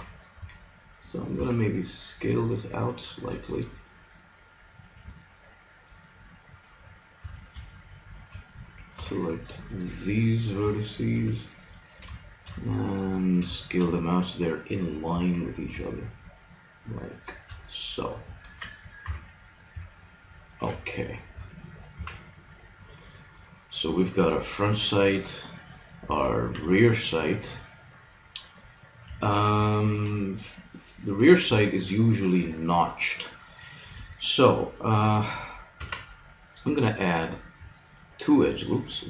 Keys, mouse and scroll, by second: 1.4 s, 4.9-6.6 middle drag, 7.2 a, 7.8-9.4 middle drag, 9.0 b, 9.4 click, 10.7 middle click, 15.1 s, 19.0 KP_Decimal, 20.6 a, 22.0 z, 26.3-28.0 middle drag, 28.4-32.2 middle drag, 32.9-35.4 middle drag, 35.8 ctrl+r.